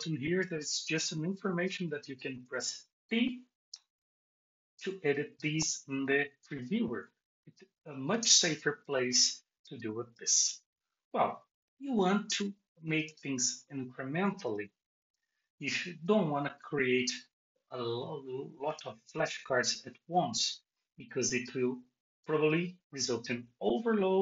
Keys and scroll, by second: 15.0 BackSpace.